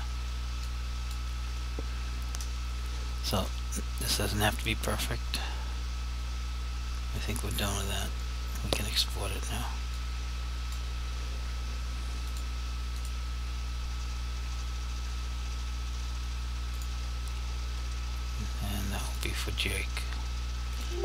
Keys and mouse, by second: 0.8 click, 12.4 click, 16.8 click.